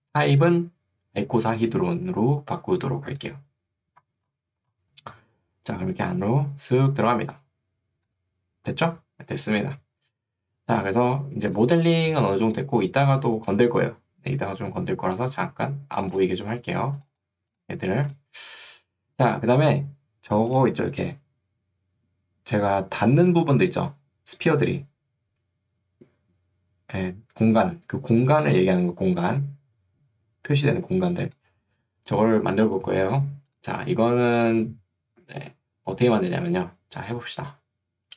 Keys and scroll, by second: 6.3 3.